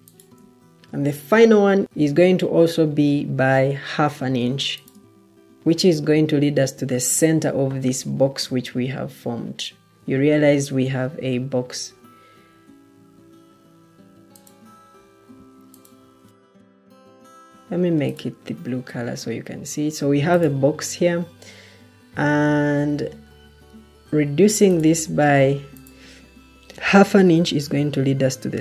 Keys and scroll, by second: 1.8 Escape, 17.4 Escape, 18.3 Escape, 22.8 Escape, 25.3 Escape, 26.8 ctrl+d.